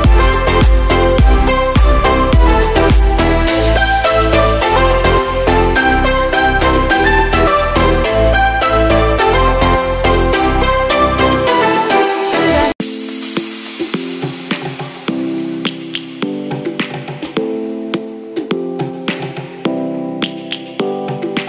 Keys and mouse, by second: 0.2 click, 1.6 ctrl+shift+click, 7.6 e, 12.6 middle click, 19.3 ctrl+z, 20.6 e.